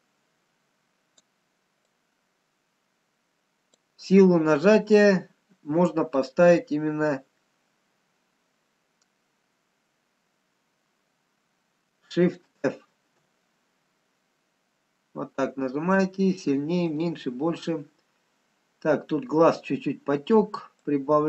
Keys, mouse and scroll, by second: 12.7 shift+f, 19.3-20.0 scroll down 2, 20.9 click, 20.9-21.2 scroll down 1.